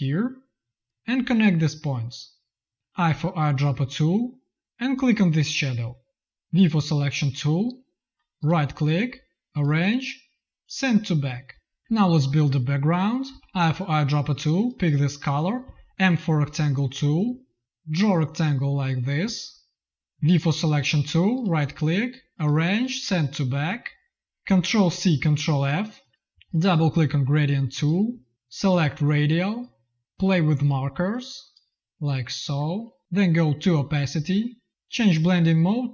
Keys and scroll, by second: 2.7 z, 3.0 i, 6.4 v, 13.2 i, 15.5 m, 20.0 v, 24.6 ctrl+c, 25.5 ctrl+f.